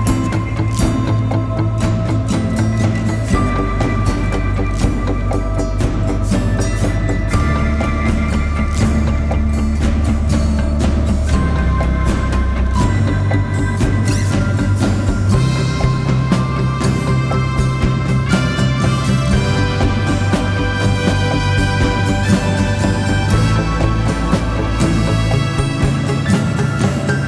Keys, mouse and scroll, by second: 0.0-0.4 typing, 1.6 typing, 11.4-12.8 typing, 12.4 double click, 18.9 double click.